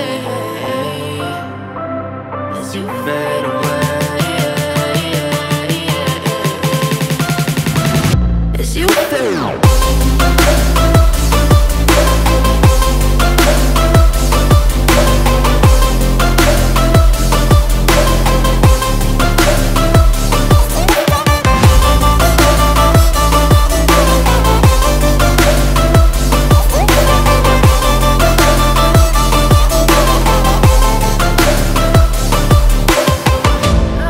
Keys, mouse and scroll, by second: 4.1 click, 10.3-14.5 drag, 20.6-24.3 drag, 25.1 space, 25.3 click, 25.6 space, 28.0 click, 32.7 click.